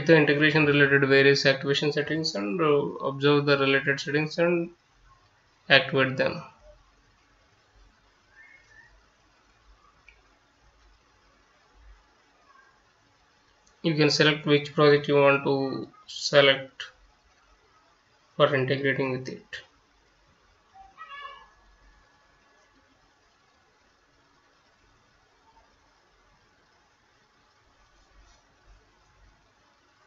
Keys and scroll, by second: 21.2 F9.